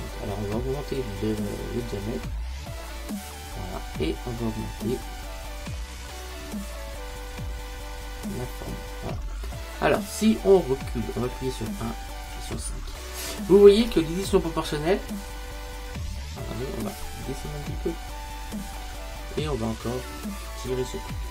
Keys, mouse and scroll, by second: 12.0 KP_1, 12.4 KP_5, 17.7-20.8 middle drag, 20.8 click.